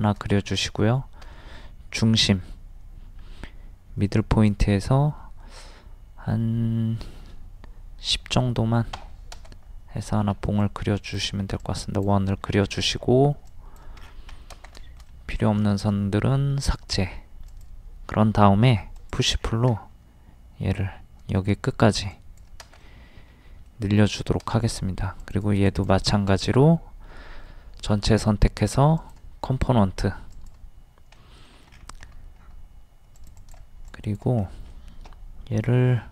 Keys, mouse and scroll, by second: 0.0 shift+middle click, 0.5 scroll up 1, 1.2 typing, 4.5 click, 8.1 KP_1, 8.2 KP_0, 10.3 space, 10.6 click, 12.3 scroll up 1, 13.4 click, 14.0 scroll down 1, 14.8 shift+middle click, 17.5 click, 18.7 d, 18.9 click, 19.4 scroll down 1, 22.1 click, 22.8 middle click, 25.2 click, 26.3 right click, 29.0 click, 31.2 middle click, 31.7 scroll up 1, 33.2 click, 34.4 middle click, 35.7 m.